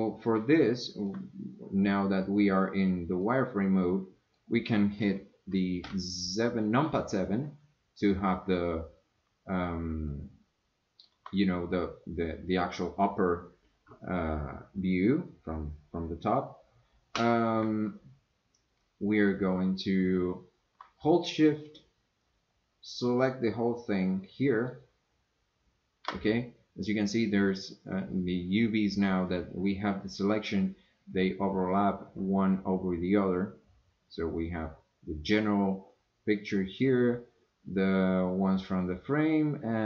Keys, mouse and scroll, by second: 1.1 scroll down 1, 1.1-2.8 middle drag, 3.2-4.3 middle drag, 5.8 KP_7, 10.3 shift+middle click, 22.2-24.7 shift+drag.